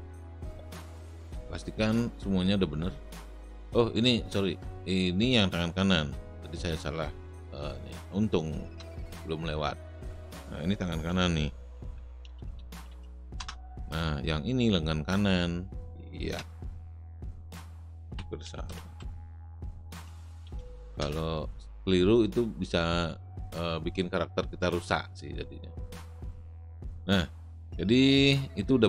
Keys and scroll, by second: 8.7 Return, 10.8-13.4 typing, 16.3 Return, 17.7-21.0 typing.